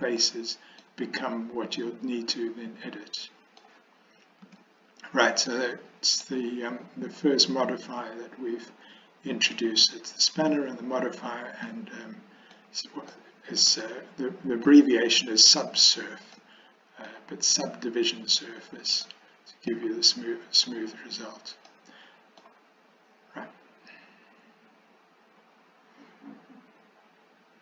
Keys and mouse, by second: 0.3 middle click, 1.9-3.7 middle drag, 4.6 Tab, 5.6-6.3 middle drag, 6.3 click, 11.7-12.6 middle drag, 13.2-13.7 middle drag, 14.7-15.6 middle drag, 16.4-17.2 middle drag, 19.1-19.8 middle drag, 21.9 middle click.